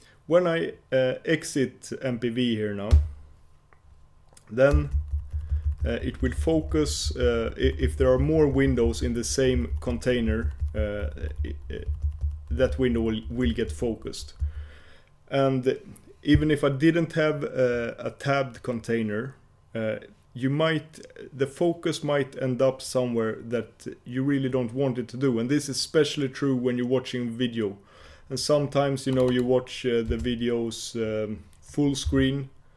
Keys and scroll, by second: 3.1 F4.